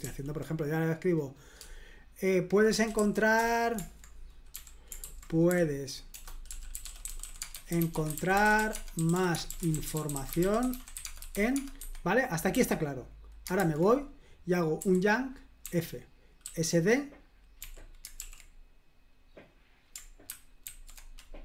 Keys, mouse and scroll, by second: 0.0 super+l, 2.8-3.5 typing, 4.5 typing, 6.5-11.8 typing, 13.6 super+h, 14.8 y, 15.6 f, 16.4 s, 17.6 d, 18.2 super+l, 20.7 ctrl+alt+v.